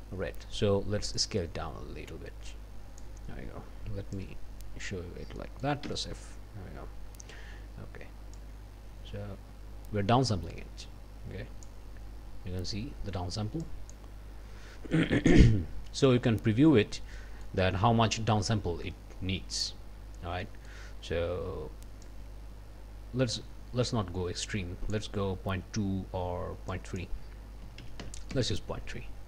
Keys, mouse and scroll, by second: 1.2-3.2 drag, 4.2 click, 5.4 click, 8.3-11.8 drag, 13.6 click, 16.6 scroll down 2, 17.1 click, 18.5-19.2 scroll up 4, 19.6-20.1 scroll down 2, 20.4 click, 22.0-25.1 drag, 26.7 click, 27.6 KP_Decimal, 27.8 KP_3, 28.3 KP_Enter, 29.1-29.2 scroll down 2.